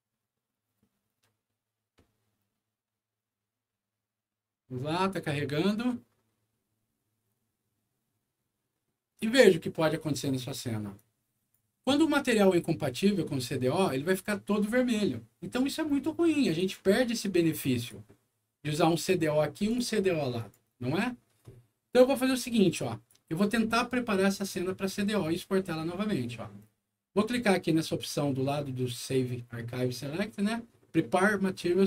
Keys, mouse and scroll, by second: 10.9 click, 12.6 scroll up 2, 13.3-13.8 scroll down 3, 16.5 click, 17.7 click, 19.0 click, 19.6 click, 20.3 click, 22.5 click.